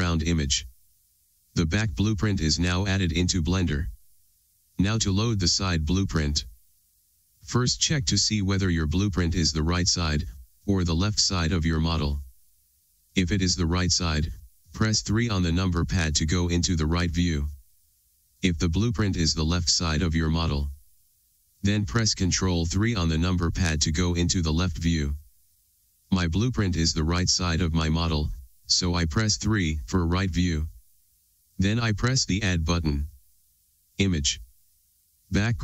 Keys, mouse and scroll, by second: 0.0 click, 29.5 KP_3.